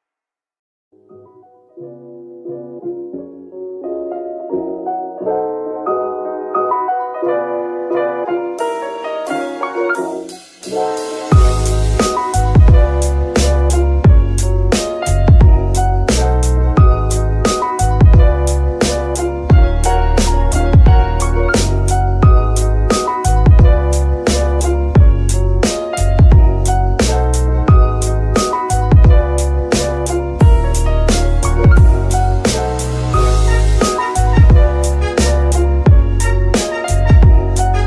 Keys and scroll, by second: 1.1 F2, 1.8 BackSpace, 2.0 BackSpace, 2.1 BackSpace, 2.2 BackSpace, 2.8 Left, 3.0 Left, 3.3 Left, 3.8 BackSpace, 4.0 BackSpace, 4.6 b, 4.8 k, 5.4 Return, 7.0 F2, 7.8-8.9 typing, 9.1 Left, 9.6 Left, 9.7 Left, 10.1 BackSpace, 20.5 Tab, 23.1 Tab, 23.9 g, 24.6 Escape, 30.4 z, 36.2 Tab, 36.8 shift+s.